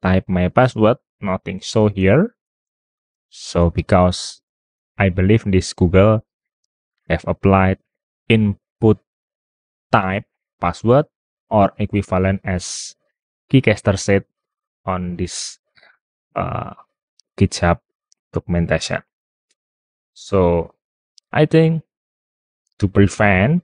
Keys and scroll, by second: 20.8 super+t, 20.8 super+w.